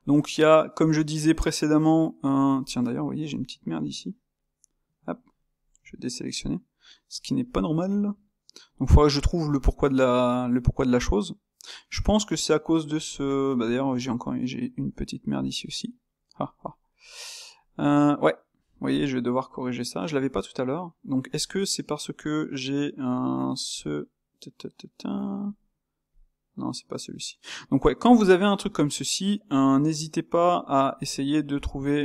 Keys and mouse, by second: 5.8 a, 7.1-11.8 ctrl+middle drag, 11.8 click, 12.1-23.1 ctrl+middle drag, 23.1 click, 23.9 click, 26.3 click, 28.2 click, 28.8 click, 31.1 click, 31.7 click.